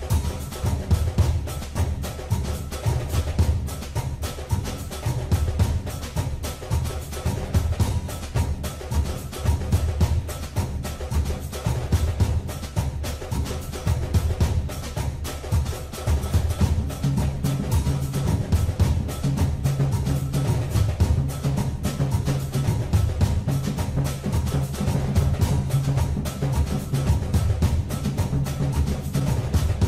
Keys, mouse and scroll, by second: 5.3 click, 7.4 KP_3, 10.7 Tab, 12.9 click, 16.1 click, 21.6 shift+d, 29.3 click.